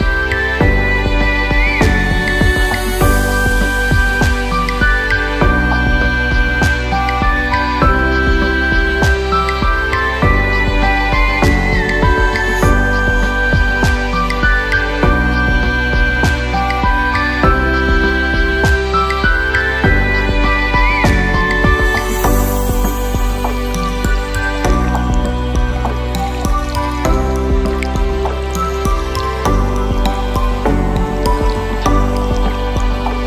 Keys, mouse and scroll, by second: 0.7 click, 3.3 Tab, 3.7-5.5 middle drag, 5.5 drag, 6.8 KP_Divide, 7.6-9.0 middle drag, 9.4 click, 9.6 scroll down 1, 9.7-11.2 middle drag, 12.2-12.9 scroll up 2, 17.8 click, 18.6-20.7 scroll down 3, 20.7-22.4 drag, 23.1 KP_0, 26.0-27.5 scroll down 2, 27.5 KP_3, 28.1 middle click, 28.9 click, 29.7 Tab, 30.2 click, 31.0 2, 31.1 click, 31.8-32.7 scroll down 1, 32.9 e.